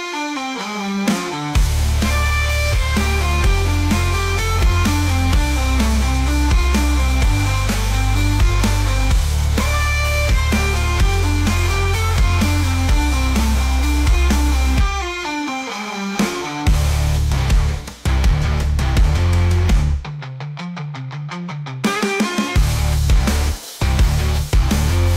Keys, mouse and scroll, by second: 1.3-3.4 drag, 5.1 click, 5.6-7.2 middle drag, 7.3-8.1 drag, 8.3 click, 8.8 click, 9.2 click, 9.5-10.2 drag, 10.7 click, 11.0 Delete, 12.0-12.7 scroll down 1, 12.7 alt+h, 13.1 click, 14.0 shift+d, 15.3 click, 16.0 r, 18.0 `, 19.1 g, 22.4 r, 23.9-25.1 drag.